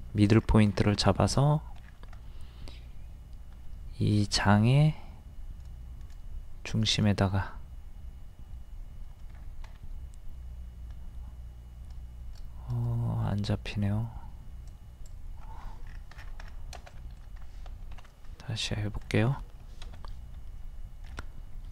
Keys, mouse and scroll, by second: 0.4 scroll down 1, 1.0 shift+middle click, 1.9 scroll down 1, 9.3-10.0 scroll up 1, 15.6 scroll up 1, 15.9 scroll down 1, 16.9 middle click, 17.4 scroll up 1, 17.9 ctrl+z, 18.3-18.7 scroll up 1, 19.9 typing, 21.1 scroll up 1.